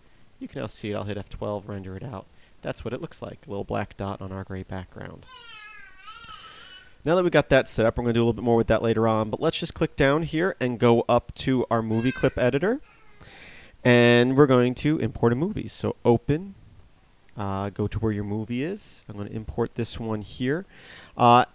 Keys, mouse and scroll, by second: 4.9 Escape, 4.9 scroll up 1, 10.2 click.